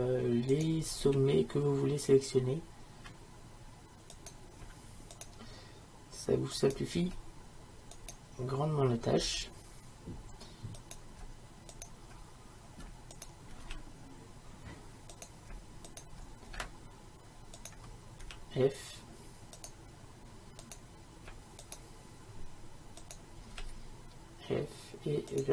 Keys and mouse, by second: 1.1 f, 6.6-8.3 right drag, 7.1 shift+f, 8.5 right click, 9.3 f, 13.7 f, 18.3 f, 23.6 f.